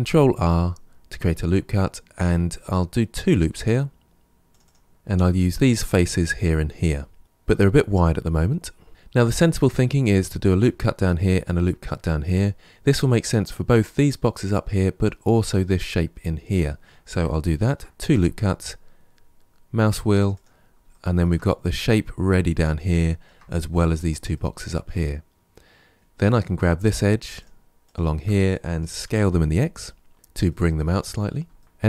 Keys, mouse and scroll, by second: 4.9 shift+middle click, 5.1 3, 5.4 click, 6.0 click, 6.6-8.6 middle drag, 17.4 ctrl+r, 20.8-26.1 shift+middle drag, 26.1 click, 27.2 shift+click, 27.7 shift+click, 28.9 s, 30.3 shift+middle click, 30.9-31.4 scroll down 1, 31.4 shift+middle click, 31.6-31.8 scroll up 1.